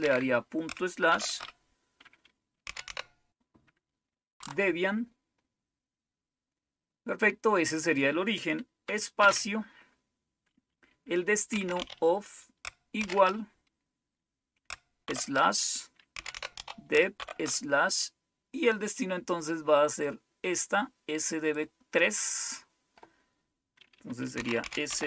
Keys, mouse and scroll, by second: 0.0 typing, 1.3 typing, 2.4-3.3 typing, 4.3 Tab, 9.1 space, 11.2-13.0 typing, 15.0-17.1 typing, 20.0-21.5 drag, 24.1-25.0 typing.